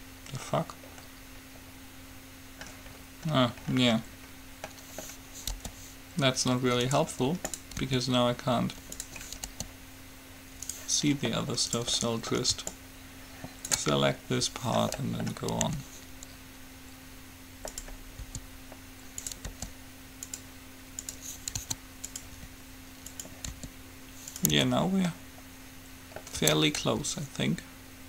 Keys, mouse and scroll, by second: 1.8-3.2 middle drag, 5.8 g, 7.8-9.6 drag, 8.0 r, 9.6 g, 11.8-13.9 right drag, 12.3-13.9 middle drag, 12.8-14.8 drag, 15.8 g, 18.3 s, 19.8 g, 21.3-22.8 drag, 21.8 s, 22.5 r, 23.8 r, 24.8 Tab, 26.6 Tab, 27.0 g.